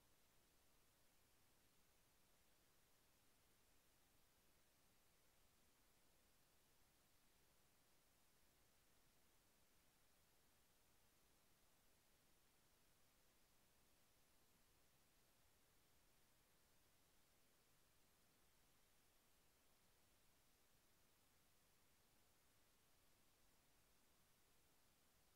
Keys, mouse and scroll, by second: 4.9 click, 7.4 click, 9.0 click, 12.9 ctrl+click, 15.5 KP_Enter, 23.9 click.